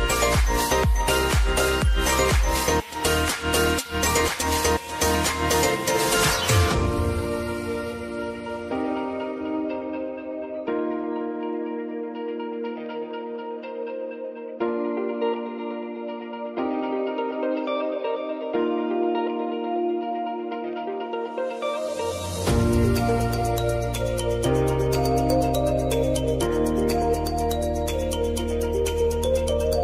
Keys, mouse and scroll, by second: 10.0 Return, 11.1-18.5 drag, 18.5 scroll up 1, 19.2 click, 23.9 Return, 24.8-28.3 drag.